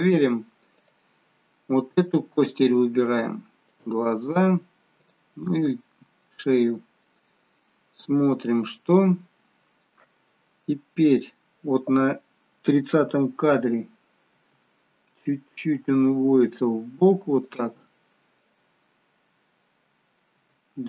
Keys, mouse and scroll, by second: 0.8 click, 2.1-2.9 scroll up 2, 3.7 shift+click, 5.3 shift+click, 6.1-6.6 scroll down 1, 7.0 middle click, 7.8-8.5 scroll down 2, 9.2-10.0 scroll down 2, 14.4 g, 20.5 g.